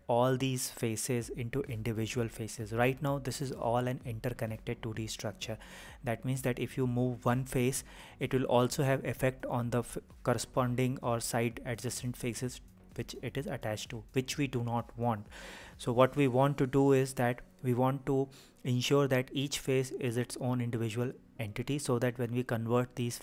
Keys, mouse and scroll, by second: 0.0-2.9 middle drag, 3.5 KP_1, 5.5-15.5 middle drag, 16.3 KP_1, 21.2 click, 22.5 g.